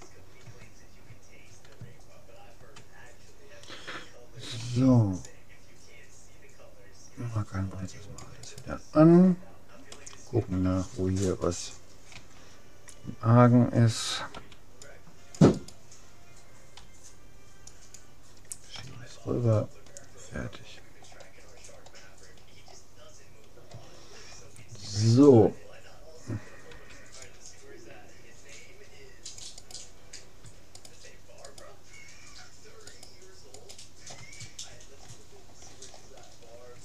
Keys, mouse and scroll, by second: 2.0-3.8 middle drag, 3.8 click, 4.6 c, 9.4 middle click, 10.8 middle click, 12.1 a, 14.4 c, 15.8-17.4 right drag, 16.8 g, 18.8 a, 19.4 middle click, 21.0 middle click, 22.1-26.7 middle drag, 26.7 click, 26.7 c, 30.8-35.2 right drag, 34.8-35.8 middle drag.